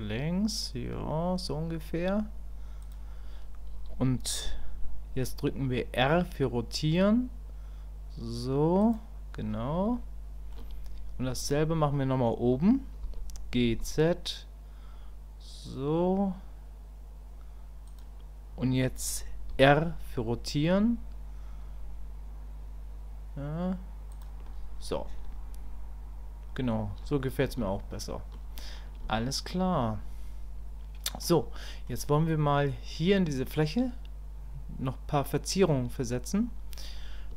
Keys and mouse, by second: 9.9 shift+click, 27.8 shift+click, 29.2 shift+click, 29.8-31.2 middle drag, 31.6 middle click, 32.2 middle click, 33.8-35.7 middle drag.